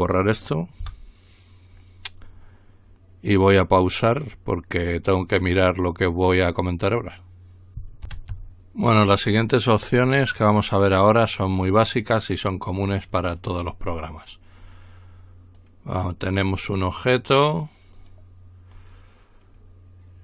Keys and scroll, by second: 0.8 Delete, 8.0 ctrl+r.